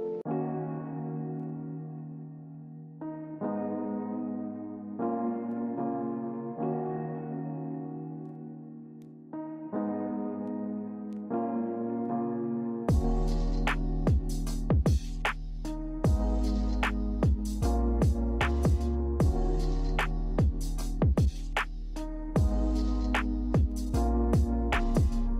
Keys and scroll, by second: 1.7 a, 7.9 q, 13.0 q.